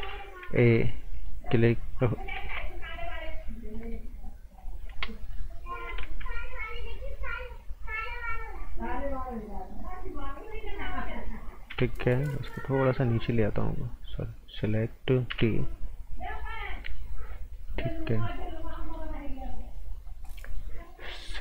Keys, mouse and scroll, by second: 0.4 a, 1.1 click, 2.4 ctrl+z, 3.7 right click, 4.9 Escape, 5.6 scroll down 1, 6.0 ctrl+z, 6.5 scroll up 1, 8.0 scroll down 1, 8.6-10.5 scroll up 1, 10.5 click, 11.6 g, 12.8 click, 15.3 t, 16.0 click, 17.2 scroll down 1, 18.1 right click, 18.4 scroll down 1, 18.7 right click, 19.2-20.0 scroll up 1, 20.2 right click.